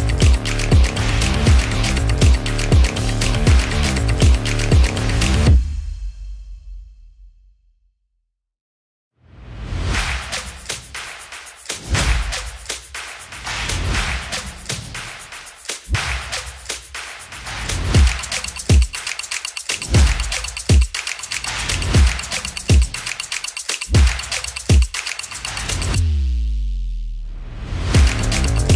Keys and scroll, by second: 0.0-2.2 typing, 4.1-6.4 typing.